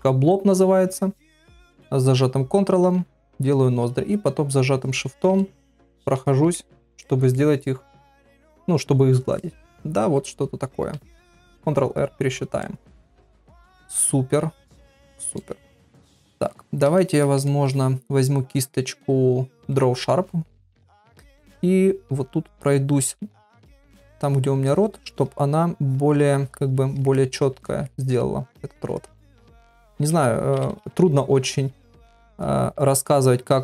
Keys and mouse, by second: 1.6-2.7 ctrl+drag, 3.2 shift+click, 3.5 shift+click, 4.4 ctrl+click, 5.5 shift+click, 6.3 ctrl+middle click, 6.5 middle click, 7.0 ctrl+middle click, 7.4 middle click, 9.4 middle click, 12.2 ctrl+r, 12.6-15.5 middle drag, 15.7 ctrl+middle click, 16.1 shift+middle click, 16.5 middle click, 17.0 shift+middle click, 17.5 ctrl+middle click, 22.1 click, 22.5 click, 22.9 click, 23.4 click, 23.8 click, 24.2 click, 24.7 click, 25.1 click, 25.9 click, 26.2 click, 26.5 click, 26.8 click, 27.2 middle click, 27.9 shift+middle click, 28.7 click, 29.0 click, 29.3 click, 29.6 click, 29.9 click, 30.5 ], 30.7 ], 31.6 click, 31.9 click, 32.2 click, 32.9 click, 33.2 click, 33.5 click.